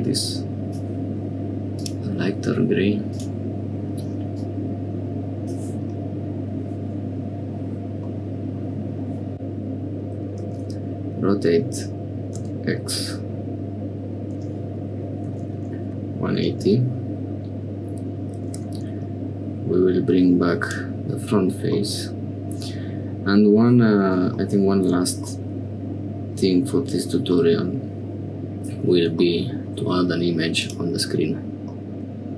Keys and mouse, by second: 1.8 click, 3.1 click, 8.1 middle click, 9.3 middle click, 20.5 click, 21.7-23.1 middle drag, 25.2-26.8 middle drag, 27.3-28.8 middle drag, 30.5 click, 31.7 click.